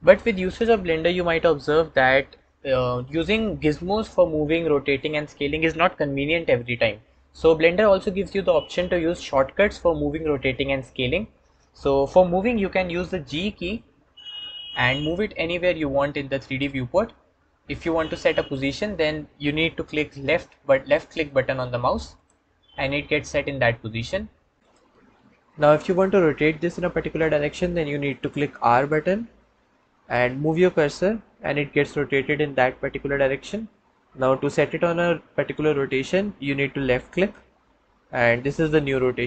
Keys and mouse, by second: 14.1 g, 22.0-24.6 drag, 29.3 r.